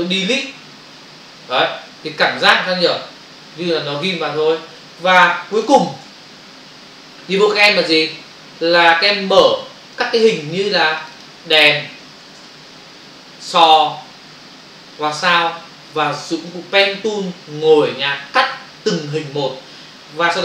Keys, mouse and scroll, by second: 3.0 ctrl+-, 5.5 click, 5.7 click, 6.2 ctrl+o, 6.5 ctrl+-, 10.0 click, 11.2 double click, 20.2 Escape.